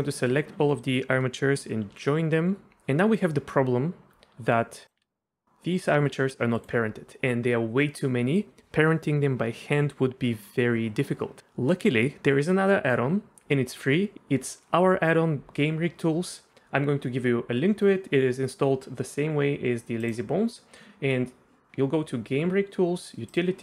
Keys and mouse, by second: 0.0 shift+middle drag, 0.6 a, 2.3 ctrl+j, 4.1 Tab, 5.0 r, 6.6 right click, 20.0 right click, 23.3 right click.